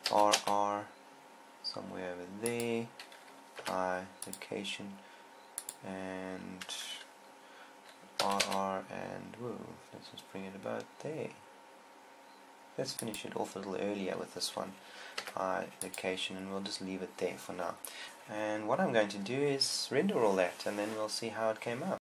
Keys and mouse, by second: 0.6 r, 3.2-8.9 drag, 4.0 i, 8.9 r, 15.6 i, 18.0 Escape.